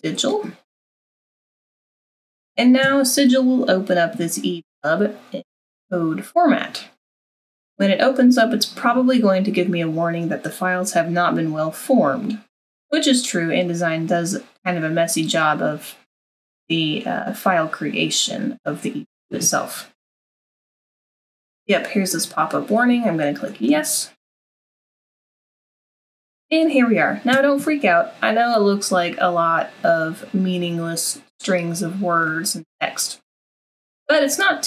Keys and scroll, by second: 1.5 super+-.